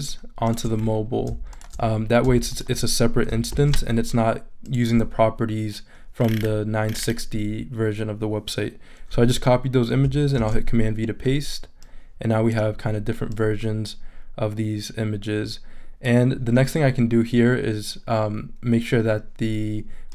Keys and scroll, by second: 3.5 shift+super+c, 10.4 super+v.